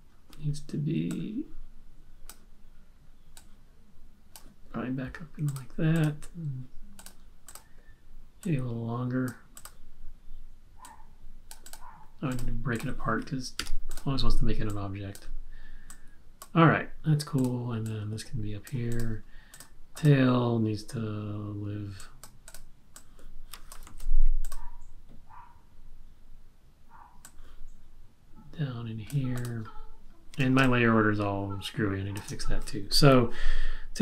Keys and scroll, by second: 13.5 super+b, 23.8 super+z, 30.7 space.